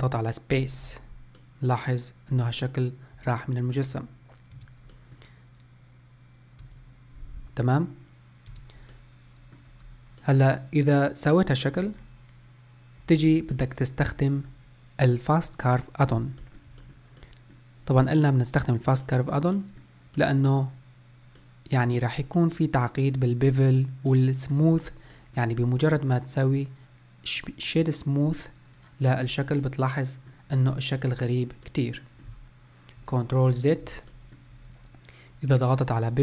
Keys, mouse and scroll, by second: 1.4-8.0 middle drag, 9.0-9.9 middle drag, 9.9-10.3 scroll down 1, 10.3-13.3 middle drag, 13.6-16.1 middle drag, 16.1-16.4 scroll up 1, 16.4-25.7 middle drag, 25.7-28.8 right drag, 29.2-29.6 scroll down 2, 29.6-30.6 middle drag, 30.6 scroll up 4, 31.0-31.7 scroll down 1, 31.7-33.4 middle drag, 33.4 ctrl+z, 34.1-34.7 middle drag, 34.7 click, 35.8-36.2 drag.